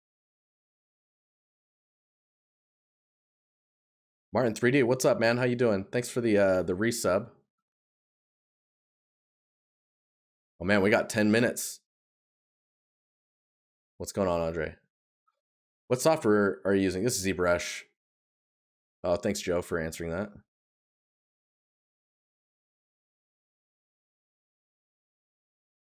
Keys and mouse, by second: 7.9 right click, 13.9 right click, 17.0 right click, 20.8 right click.